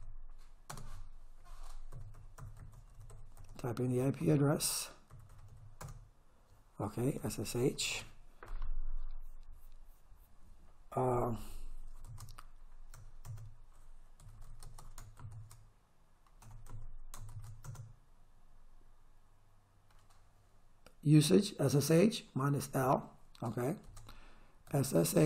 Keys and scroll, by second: 0.0-6.0 typing, 7.2 s, 7.8 h, 7.9 space, 12.1 shift+/, 13.2 Return, 14.2 s, 14.5 h, 14.6 space, 15.2 shift+/, 16.5 BackSpace, 16.7 /, 17.3 shift+/, 17.6 Return, 23.9 Caps_Lock, 24.7 s, 25.1 h.